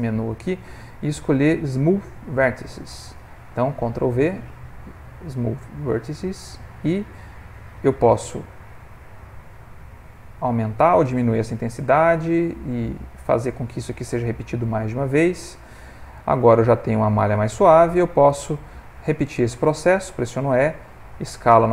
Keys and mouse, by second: 3.8 ctrl+v, 8.7 click, 11.7 click, 13.0 click, 14.9 s, 19.7 e.